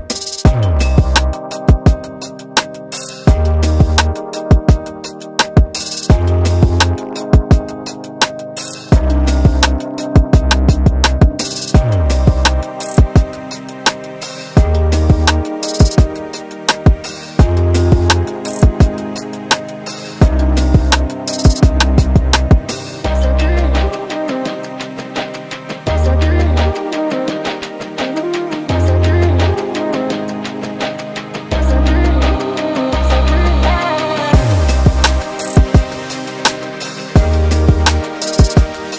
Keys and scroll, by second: 6.5 space, 7.2 Delete, 8.1 q, 10.1 space, 11.2 m, 20.3 s, 29.0 s, 31.3 space, 32.6 m, 36.2 s, 38.2 s.